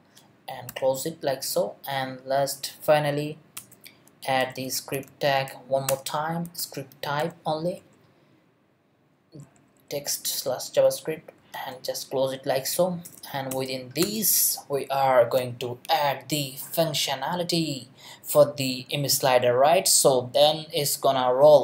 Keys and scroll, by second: 6.8-7.7 typing, 7.8 Return, 9.4 Down, 10.3 Return, 11.4 shift+Return, 11.5 shift+., 13.0 Return, 14.7 Up.